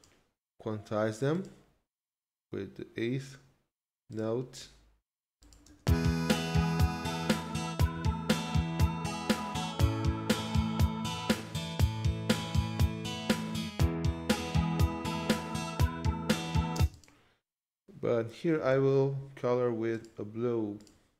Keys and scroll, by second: 5.6 space, 16.7 space.